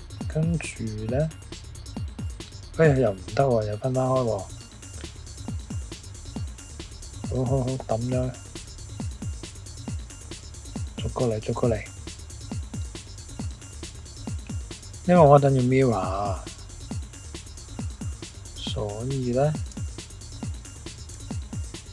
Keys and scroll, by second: 10.9-11.7 typing, 19.7 typing, 21.1 typing.